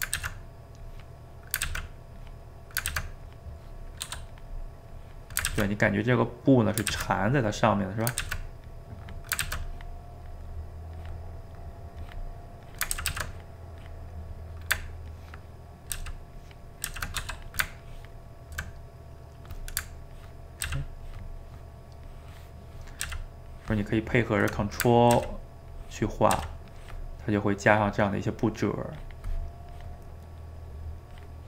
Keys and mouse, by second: 0.2 ctrl+z, 0.9 click, 1.7 ctrl+z, 2.2 click, 2.9 ctrl+z, 3.3 click, 4.0 f, 4.9 click, 5.5 ctrl+z, 5.8-6.9 drag, 6.9 ctrl+z, 7.2 click, 7.9 middle click, 8.2 ctrl+z, 8.6 click, 9.4 ctrl+z, 9.7-11.4 drag, 11.4 middle click, 12.0 click, 13.0 ctrl+z, 13.1 ctrl+z, 13.3 click, 14.3 middle click, 15.1 ctrl+click, 16.0 ctrl+z, 16.3 ctrl+click, 16.9 ctrl+z, 17.2 f, 17.8 ctrl+click, 18.7-20.1 middle drag, 20.1 ctrl+click, 20.7 ctrl+z, 21.1-23.1 ctrl+drag, 23.1 ctrl+z, 23.5-24.5 ctrl+drag, 24.5 middle click, 25.1 ctrl+z, 25.7 ctrl+click, 26.4 ctrl+z, 26.7-31.4 ctrl+drag.